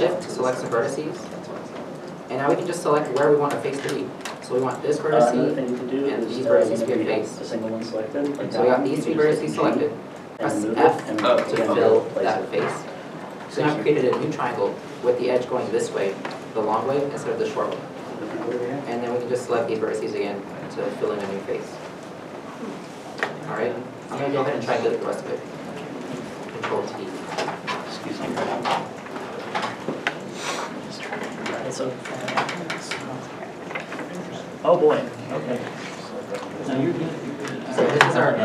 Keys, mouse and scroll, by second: 1.7 1, 3.2 shift+Caps_Lock, 5.2 shift+click, 6.4 shift+click, 7.1 middle click, 12.3 middle click, 18.2 middle click, 19.6 shift+click, 21.2 middle click, 23.5 scroll down 1, 23.9 a, 25.5 middle click, 28.9 middle click, 34.2-35.0 scroll up 1, 35.0 middle click, 35.4 a, 36.0 middle click, 36.2 scroll down 1, 36.8 middle click.